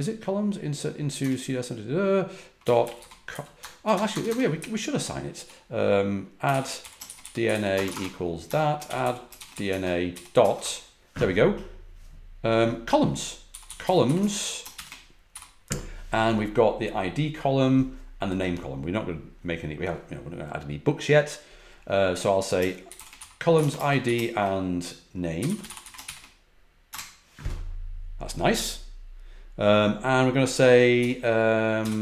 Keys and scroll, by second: 2.3-10.5 typing, 13.2-14.7 typing, 22.6-23.5 typing, 25.1-26.5 typing, 26.8 Return, 30.9 Up, 31.7 typing.